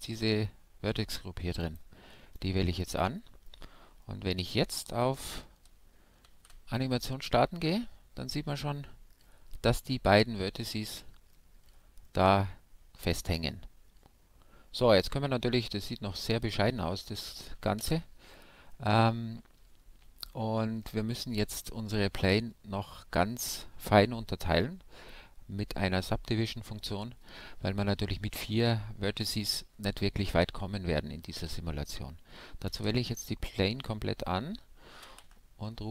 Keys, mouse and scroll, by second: 2.3-6.2 middle drag, 6.2 alt+a, 8.5-17.4 middle drag, 16.8 alt+a, 17.8 shift+Left, 18.8-29.2 middle drag, 29.6 Tab, 32.7 a, 32.9 a.